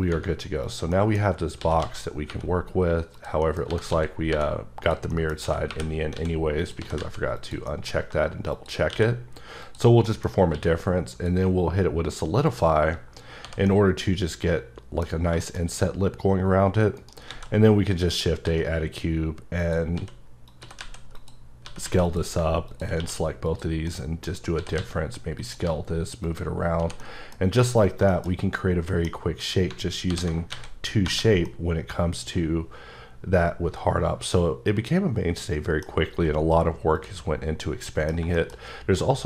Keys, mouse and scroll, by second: 0.6 click, 0.9 middle click, 1.6 s, 1.8 x, 2.3 y, 3.1 click, 3.4 middle click, 3.7-4.3 typing, 4.8 click, 5.1 scroll, 5.1 middle click, 5.4-7.0 typing, 6.6 click, 7.4 click, 7.7 middle click, 8.5 click, 8.9 q, 9.6 click, 10.1 middle click, 10.5 q, 11.1 click, 12.5 click, 12.9-13.4 scroll up 1, 13.4 h, 13.7 middle click, 15.2-15.7 scroll up 3, 15.4 shift+middle click, 17.0 shift+right click, 17.3 shift+a, 18.1 click, 18.5 s, 19.6 click, 20.0-21.8 typing, 20.5 click, 21.1 click, 21.5 scroll down 2, 22.1 click, 23.0 q, 23.5 click, 23.9 middle click, 24.2-25.6 typing, 24.3 scroll up 3, 25.4 click, 26.3 click, 26.5 scroll down 3, 26.8 h, 27.0 middle click, 27.4-28.1 scroll down 4, 28.1 shift+middle click, 28.3-28.9 scroll up 2, 28.9 middle click, 29.4 click, 30.1 alt+h, 30.5 alt+a, 31.1 1, 31.5-33.5 middle drag, 36.0-37.0 scroll up 2, 37.0 click, 37.4 scroll up 2, 37.5 scroll down 2, 37.6 middle click, 38.3 double middle click, 38.6 scroll down 1, 39.0 middle click.